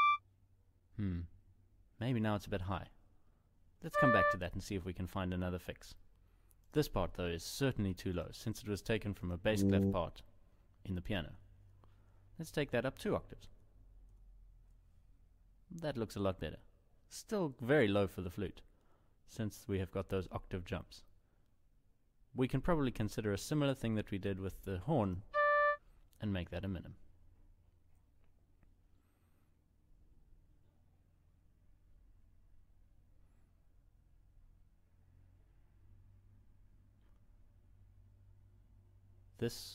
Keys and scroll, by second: 3.5 ctrl+Down, 13.2 ctrl+Up.